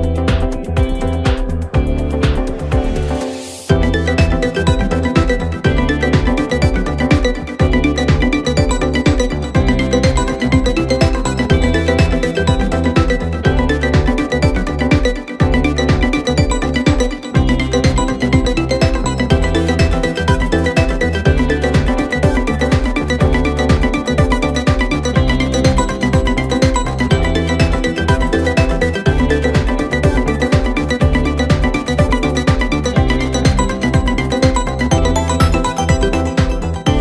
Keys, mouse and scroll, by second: 0.9 click, 1.9 1, 2.7 click, 7.3-8.5 scroll up 3, 8.5 click, 8.9-11.9 middle drag, 11.9 click, 12.7 click, 13.2-13.8 scroll down 1, 13.8-15.1 middle drag, 15.1 KP_1, 16.1-16.7 scroll up 1, 16.7 s, 18.4 g, 21.5 s, 24.6 g, 26.6 Tab, 26.9-28.3 scroll down 5, 28.3 click, 28.7 scroll down 1, 29.0-29.6 middle drag, 29.6-30.2 scroll down 1, 30.2 scroll down 1, 30.4 KP_1, 32.3-37.0 drag.